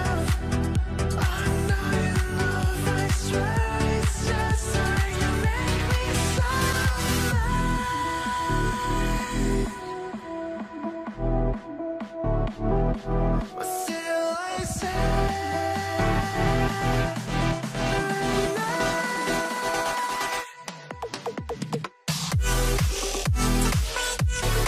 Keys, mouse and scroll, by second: 0.0 z, 0.5 middle click, 2.2 scroll up 1, 3.4 middle click, 3.8-4.8 scroll up 1, 8.0 scroll down 1, 8.2 middle click, 8.4 scroll up 1, 8.9 alt+middle click, 9.8-10.9 scroll up 1, 11.1 scroll up 1, 11.2 scroll down 1, 11.4 middle click, 12.0 scroll up 1, 14.6 scroll up 1, 15.6 scroll, 15.7 scroll down 1, 16.3 middle click, 17.5 shift+click, 19.5 middle click, 19.6 scroll down 1, 19.9 middle click, 20.4 middle click, 21.9 double click, 22.2 middle click, 22.4 scroll down 1, 22.7 scroll up 2, 23.7-24.6 typing, 23.9 scroll, 24.2 scroll down 1, 24.4-24.6 scroll up 1.